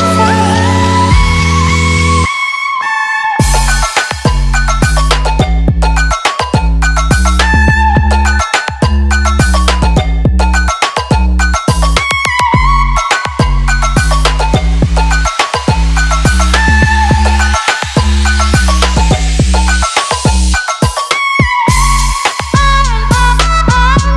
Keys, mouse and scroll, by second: 17.6 Down, 18.0-18.7 typing, 19.2 Down, 20.8 click.